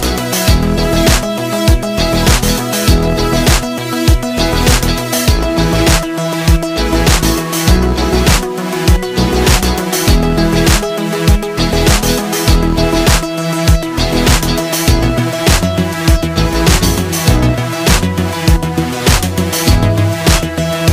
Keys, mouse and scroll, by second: 3.0 click, 10.0 click, 15.5-19.1 drag, 19.1 click.